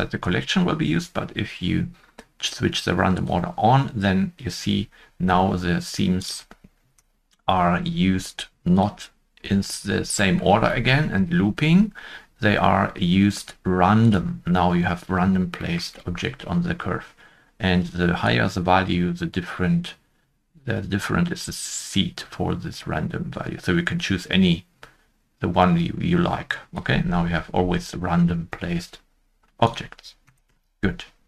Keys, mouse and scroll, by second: 6.7 middle click, 10.1 0, 10.1 Return, 10.1 middle click, 10.6-11.3 scroll down 1, 15.4-15.8 scroll down 2, 15.6 shift+middle click, 30.2 0, 30.4 Return.